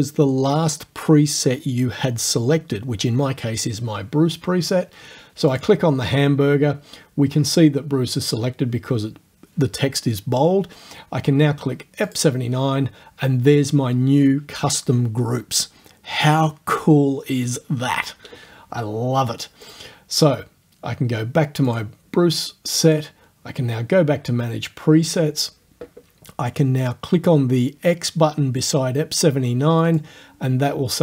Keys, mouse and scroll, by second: 5.5 click, 12.1 click, 19.7 click, 21.7 click, 22.9 click, 25.1 click, 29.8 click.